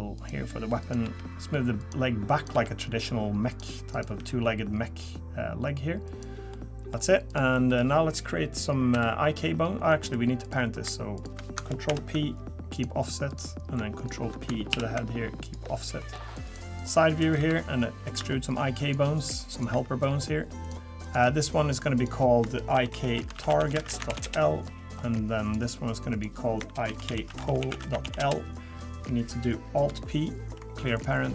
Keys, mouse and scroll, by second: 0.8 click, 1.0 g, 2.4 click, 2.5 g, 3.9 click, 4.1 g, 6.5 middle click, 7.3 click, 7.7 middle click, 8.9 KP_3, 9.9 middle click, 10.4 click, 11.2 shift+click, 11.9 ctrl+p, 13.3 click, 14.0 shift+click, 14.7 ctrl+p, 16.0 middle click, 16.4 click, 16.8 click, 17.4 KP_3, 18.2 e, 19.5 click, 19.7 e, 21.0 click, 21.9 click, 25.4 click, 26.1 click, 30.4 alt+p.